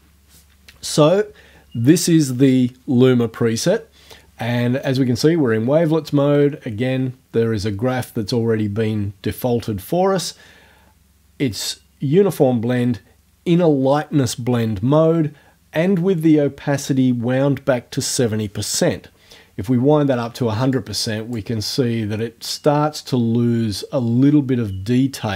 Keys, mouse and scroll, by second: 20.8 click.